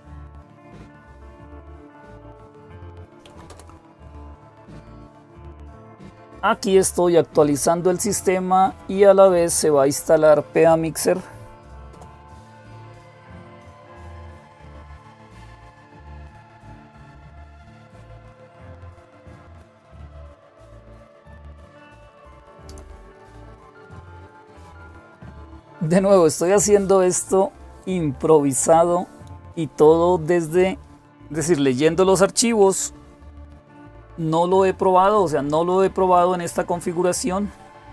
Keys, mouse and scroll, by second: 0.5-3.8 typing, 11.7 Return.